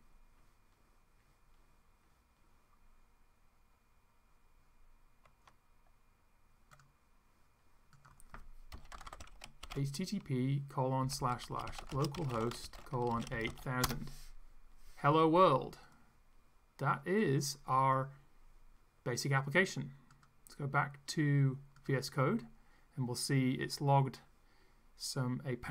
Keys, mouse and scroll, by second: 6.7 click, 8.0 click, 8.5-13.8 typing, 13.9 Return, 16.0-17.4 drag, 20.1 click, 21.8 click.